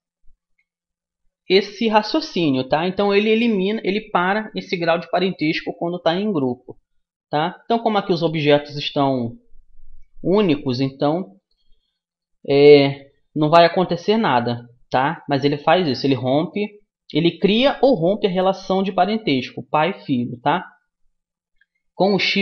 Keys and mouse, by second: 11.4-13.1 drag, 13.1 middle click, 14.5-22.4 middle drag.